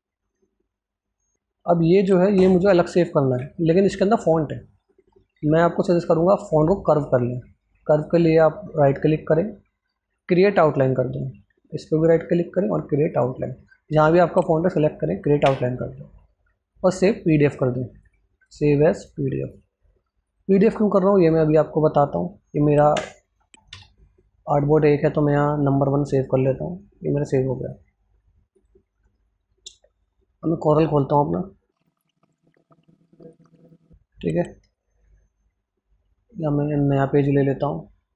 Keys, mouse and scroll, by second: 2.4 ctrl+alt+scroll up 1, 3.5 click, 14.6 Scroll_Lock, 14.8-15.2 scroll down 4, 26.1 click, 27.5 click, 31.0 click.